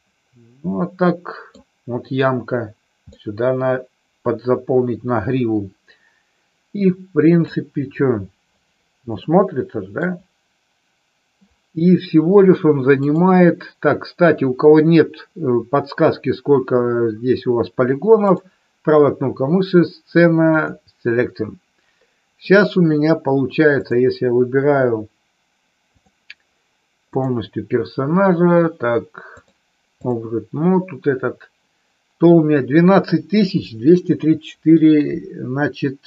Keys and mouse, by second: 3.0-7.4 middle drag, 9.2 middle click, 23.8 click, 25.9 click, 27.0 click, 29.3 click.